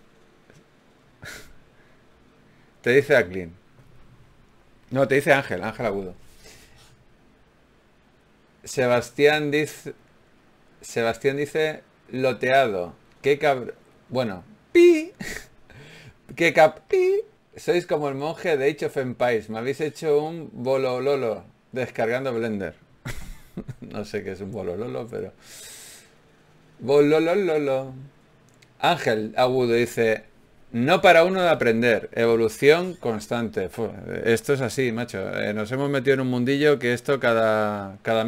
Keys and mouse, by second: 6.7 right click, 6.9 f, 7.3 ctrl+Tab, 9.1-10.9 typing, 11.7 ctrl+z, 11.9 ctrl+z, 13.7 f, 15.1-17.5 typing, 19.9 f, 20.9 f, 22.6 f, 28.6 KP_Divide, 31.0 a, 31.2 a, 31.8 z, 32.4 Tab.